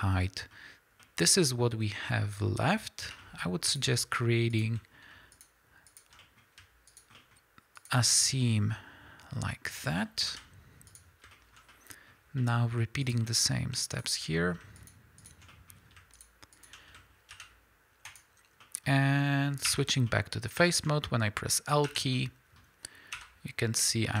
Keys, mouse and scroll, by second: 3.1 2, 3.7 click, 4.5 shift+click, 5.0-5.3 scroll up 2, 5.3 shift+click, 5.9 shift+click, 6.1 middle click, 6.9 shift+click, 7.2 shift+middle click, 7.8 shift+click, 10.3 ctrl+e, 11.3-13.0 shift+middle drag, 13.0 click, 13.9 shift+click, 14.4 middle click, 14.8 shift+click, 15.2 shift+click, 15.5 middle click, 16.2 shift+click, 16.5 shift+click, 17.3 ctrl+e, 18.6-24.2 middle drag, 19.7 3, 21.8 l, 23.1 l.